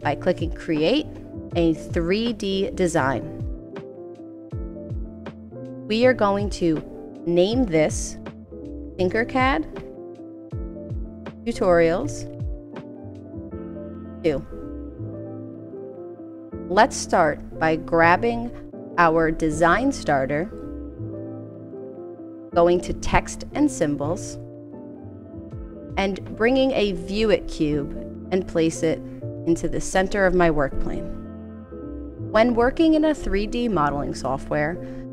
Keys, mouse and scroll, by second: 1.4 click, 2.7 click, 6.4 click, 8.3-14.0 typing, 15.7 click, 17.9 click, 20.4 click, 24.3 click, 26.9 click, 29.6 click.